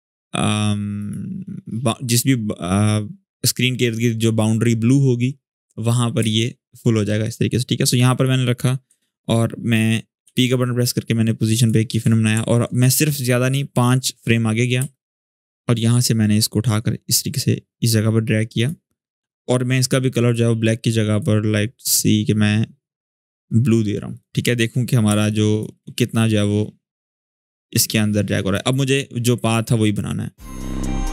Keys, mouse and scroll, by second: 0.7 click, 5.9 click, 7.2 scroll up 1, 10.0 p, 11.3 click, 12.2 alt+scroll up 1, 12.9-14.1 drag, 14.5 space, 14.6-15.3 click, 15.0 space, 15.8-18.6 drag, 24.8 space, 25.0 click, 25.3 space, 26.9-28.5 drag, 30.4 click, 30.8-31.1 click.